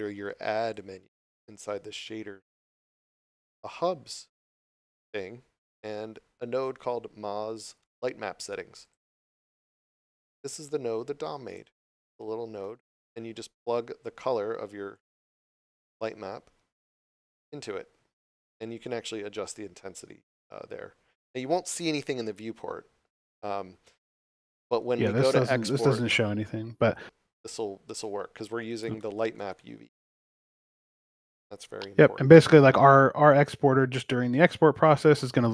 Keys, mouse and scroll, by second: 0.6 click, 11.4 click, 12.0 shift+middle click, 12.8 scroll up 1, 23.3 scroll down 1, 24.1 shift+middle click, 25.0 scroll up 1, 28.7 scroll up 1, 28.9 shift+middle click, 29.5 scroll up 1, 30.1 shift+middle click, 30.4 scroll up 1, 33.2 shift+middle click.